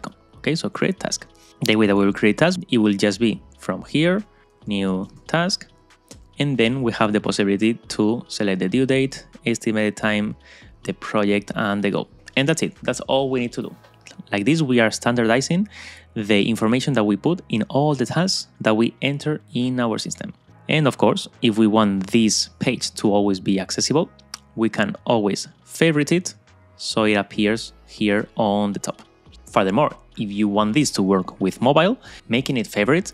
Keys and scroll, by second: 4.4 super+a, 6.2 Tab.